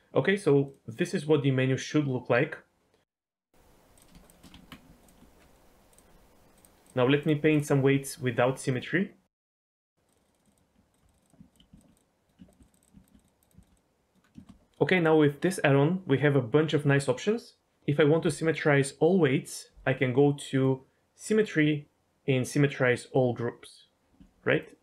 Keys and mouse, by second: 0.6 click, 0.9-3.2 drag, 4.2 shift+click, 4.5 Tab, 6.6 click, 6.8 drag, 7.2-7.6 drag, 10.1 click, 11.1 click, 12.7 click, 13.0 ctrl+click, 13.2 click, 13.4 click, 13.6 ctrl+click, 14.4 shift+middle click, 20.5-23.4 drag, 24.5 ctrl+click.